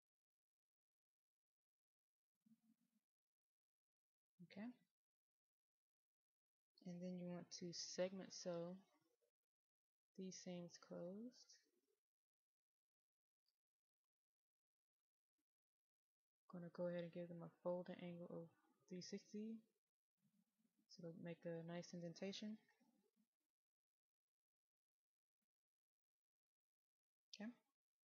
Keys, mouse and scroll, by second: 24.3 click, 26.0-28.0 middle drag.